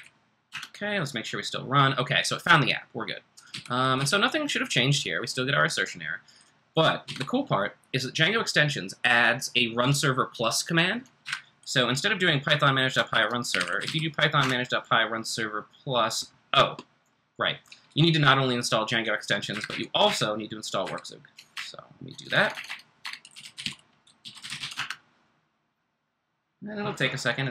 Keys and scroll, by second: 0.5 shift+Return, 3.5-3.9 typing, 7.1 ctrl+c, 11.2 Up, 12.9-14.4 typing, 19.5 Up, 19.6 Up, 20.0 Up, 20.8 Up, 21.5-25.1 typing.